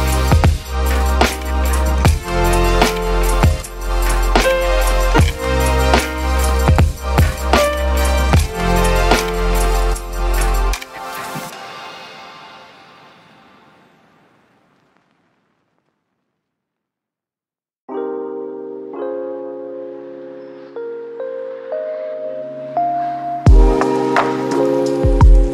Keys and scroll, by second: 0.0-0.2 typing, 3.1 ctrl+d, 3.2-5.8 typing, 3.8 ctrl+z, 9.3-9.7 j, 10.5 j, 10.7 j, 11.6 ctrl+z.